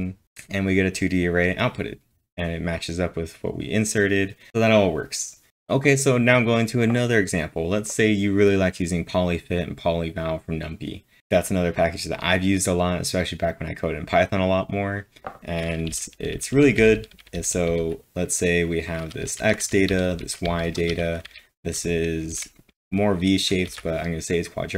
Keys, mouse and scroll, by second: 4.5-5.5 drag, 15.9 typing, 20.7-22.3 typing, 23.4-24.7 typing.